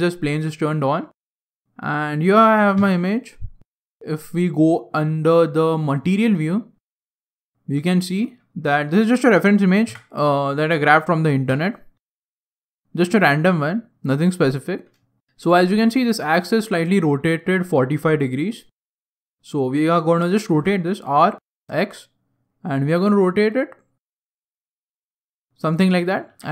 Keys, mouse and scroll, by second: 1.4 scroll up 1, 1.5 scroll down 2, 1.7 scroll down 1, 2.7-6.5 scroll up 3, 2.7 KP_Decimal, 6.5 click, 7.6 scroll down 1, 7.8 scroll up 1, 7.9 shift+middle click, 8.4 scroll up 1, 8.4 middle click, 9.8 KP_1, 12.2 KP_3, 13.1 scroll down 2, 15.1 shift+middle click, 15.2 scroll down 2, 20.5 r, 25.2 click, 26.2 g.